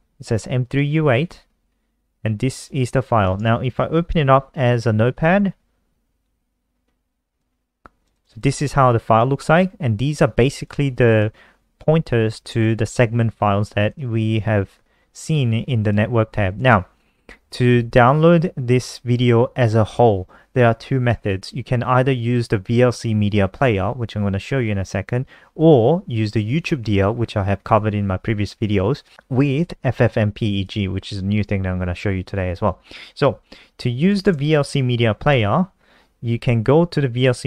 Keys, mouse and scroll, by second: 0.0 super+w, 1.6 scroll down 2, 2.9 click, 3.5 right click, 4.6 h, 5.8 n, 7.6 click, 8.5 click, 10.3 click, 14.7 alt+F4, 16.1 click, 34.2-35.1 typing, 35.6 Return.